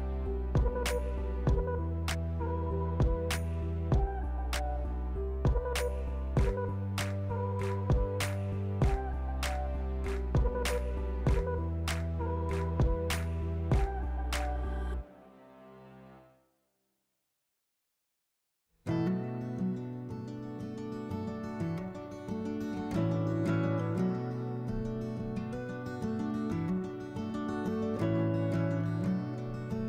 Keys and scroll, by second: 0.3 s, 2.6-3.5 typing, 5.6 2, 20.7 s, 22.6 s, 23.8 s.